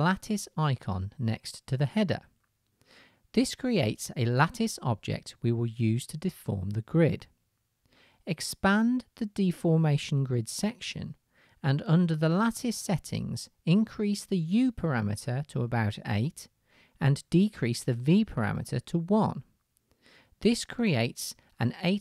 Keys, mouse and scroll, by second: 10.9-22.0 drag, 10.9-21.0 middle drag.